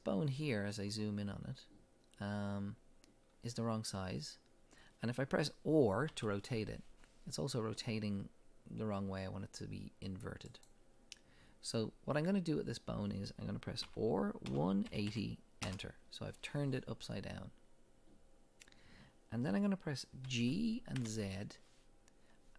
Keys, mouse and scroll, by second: 3.4-3.9 scroll down 1, 6.1 r, 10.6 right click, 13.9 r, 15.7 Return, 19.5-20.3 scroll down 2, 20.3 g.